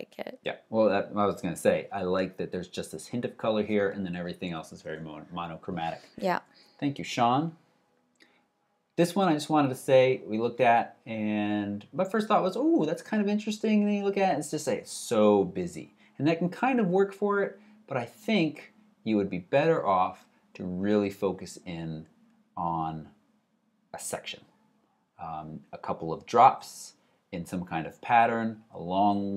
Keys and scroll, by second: 6.5 alt+super+Right.